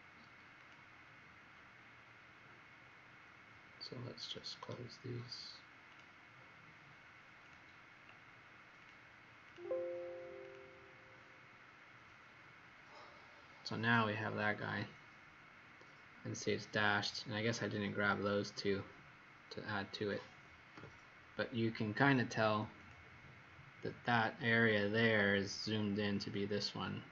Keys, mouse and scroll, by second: 0.5 click, 4.5 right click, 5.8 click, 9.4 click, 10.4 click, 15.8-16.5 scroll up 2, 16.7-20.7 scroll up 1, 20.7 z, 22.7 click, 25.7-27.1 scroll down 8.